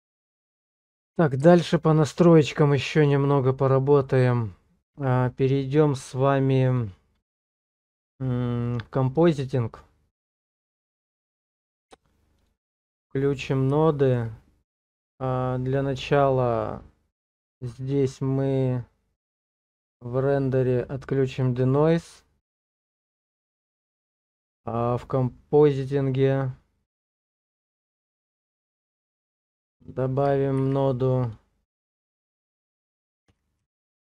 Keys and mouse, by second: 0.2 middle click, 1.5 shift+middle click, 12.4 click, 13.9 shift+click, 14.9 click, 17.0 click, 21.3 click, 27.0 click, 28.8 click, 29.8 click, 30.6 shift+a.